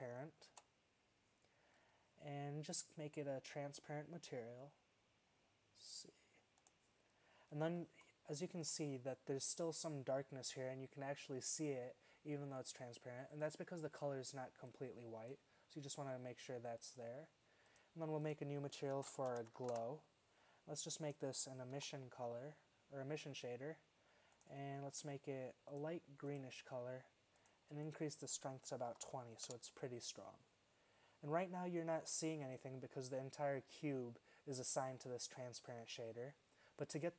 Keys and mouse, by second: 8.2-13.5 middle drag, 13.5-14.2 drag, 15.0-20.1 drag, 21.1-22.8 drag, 24.4-26.1 drag, 28.0-29.8 drag, 35.0-36.8 drag.